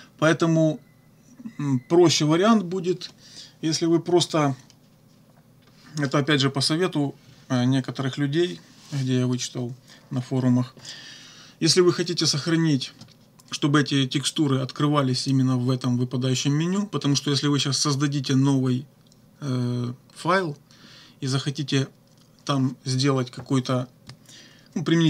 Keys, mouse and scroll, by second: 15.2 click.